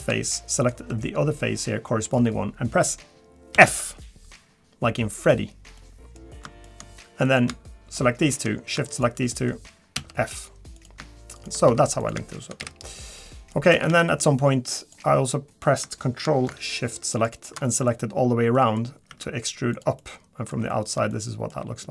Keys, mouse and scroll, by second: 0.6 shift+click, 1.0 middle click, 1.9 middle click, 3.5 f, 5.8 middle click, 6.4 middle click, 7.2 click, 8.9 shift+click, 9.2 middle click, 9.9 f, 10.8 click, 11.3 shift+click, 11.7 f, 12.0 click, 12.3 shift+click, 12.6 f, 12.9-13.2 scroll down 2, 13.2 middle click, 13.7 a, 13.9 a, 14.8 click, 17.1 ctrl+shift+click, 17.6 middle click, 18.5 middle click, 19.1 e, 20.0 middle click, 20.7 shift+middle click, 20.8 shift+middle click, 21.1 middle click, 21.6 g.